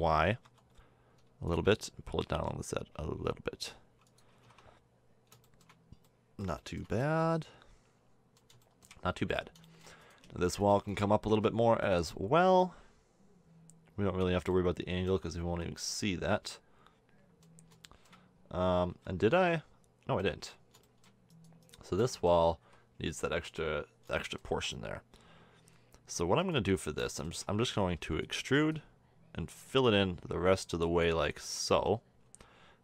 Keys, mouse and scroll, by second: 2.1 g, 4.3 a, 4.4 Tab, 7.0 middle drag, 7.5 middle drag, 8.1-8.5 middle drag, 9.8 middle click, 10.2 Tab, 10.7 Tab, 11.2 Tab, 14.4 middle click, 15.5 a, 16.3 middle click, 17.1 middle click, 17.8 middle click, 18.4 Tab, 18.8 z, 19.5 middle click, 20.2 Tab, 22.1-22.6 middle drag, 22.6 a, 26.3-27.9 middle drag, 27.9 e, 29.8 click, 31.3 a, 31.6 Tab, 32.2 Tab.